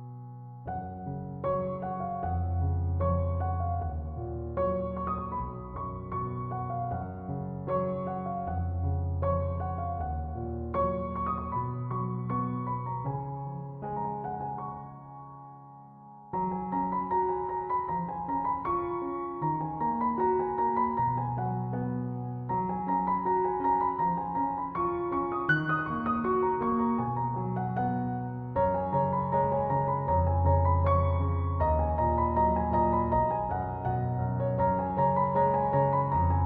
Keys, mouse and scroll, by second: 13.7 Return, 34.2 1, 34.4 2, 35.4 Return.